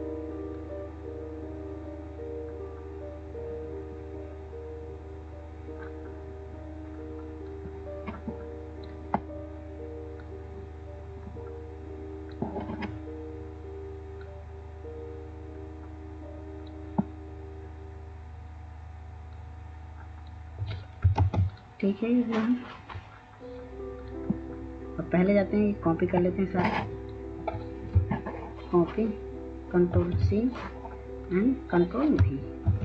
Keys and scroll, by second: 21.3 ctrl+space, 30.0 ctrl+c, 32.7 ctrl+v.